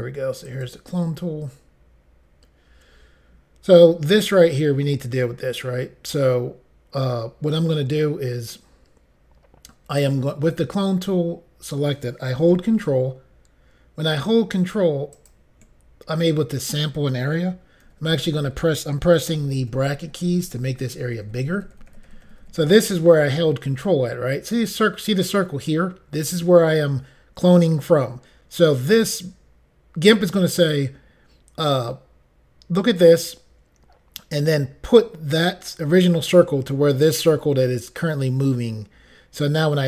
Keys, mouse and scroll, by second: 0.5 click, 15.2 ctrl+click, 19.2-20.0 typing, 23.9 typing.